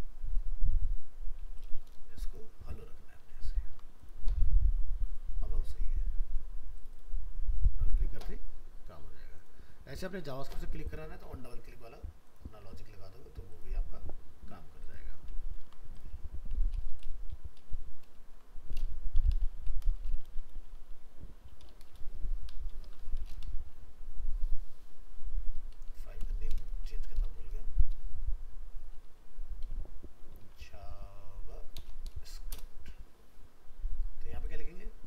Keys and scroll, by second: 3.2 ctrl+s, 15.6 ctrl+s, 16.8 alt+f, 16.9 alt+移, 18.2 shift+Left.